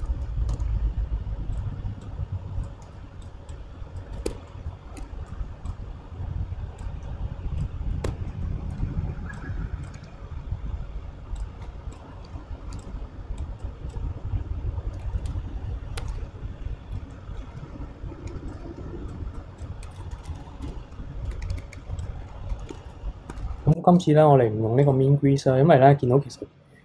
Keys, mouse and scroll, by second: 0.0 a, 0.5 s, 4.3 Tab, 4.5-5.0 middle drag, 5.0 KP_3, 5.7 click, 6.8-8.1 drag, 8.1 Tab, 8.3 middle drag, 8.6-9.3 scroll up 1, 9.3 click, 9.8 alt+click, 11.4 click, 11.9 click, 12.8 alt+click, 13.4 click, 15.1-16.0 middle drag, 16.0 KP_3, 17.1-18.5 middle drag, 18.5 alt+click, 19.1 click, 20.0 KP_2, 20.6 KP_3, 21.3 ctrl+z, 21.6 ctrl+z, 22.0 click, 22.6 scroll up 4, 22.8-23.8 shift+middle drag, 23.8 ctrl+r.